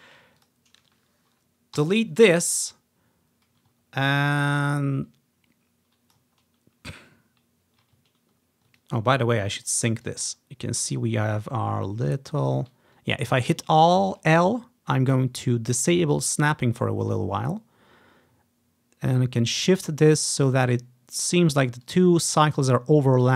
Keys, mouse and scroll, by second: 0.0 s, 0.5-2.1 drag, 1.9 Delete, 2.4-3.9 drag, 3.5 typing, 3.9-4.9 ctrl+scroll up 1, 4.9-7.8 drag, 6.5 ctrl+scroll down 1, 6.7 ctrl+scroll up 1, 7.0 ctrl+scroll down 1, 7.3 scroll up 2, 8.2 scroll down 1, 8.5 scroll up 1, 8.9 click, 9.9 scroll up 1, 10.2-21.7 drag, 21.5-21.9 ctrl+scroll down 1, 22.0-23.3 ctrl+drag, 22.3 ctrl+scroll up 1.